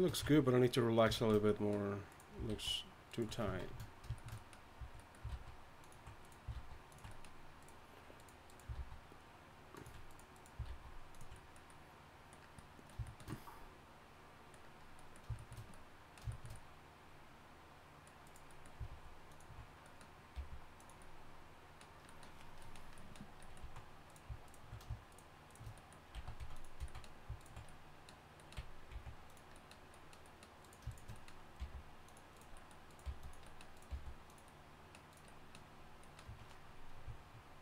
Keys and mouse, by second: 0.2 ctrl+Tab, 2.1 click, 2.5 alt+s, 3.6 shift+Tab, 5.3 alt+s, 6.5 alt+s, 7.1 middle click, 8.7 alt+s, 10.7 alt+s, 11.3 middle click, 18.9 alt+s, 20.3 g, 22.3 alt+s, 23.6 z, 24.0 click, 26.1 x, 26.8 z, 28.9 x, 30.3-33.2 drag, 31.6 g, 33.0 g, 33.9 g, 36.3 Tab.